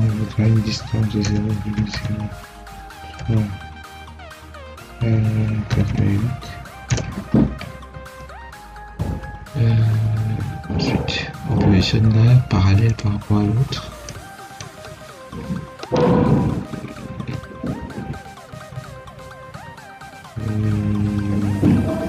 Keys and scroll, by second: 1.1 0, 1.5 ., 1.8 0, 5.6 8, 6.8 Return, 13.4 Escape.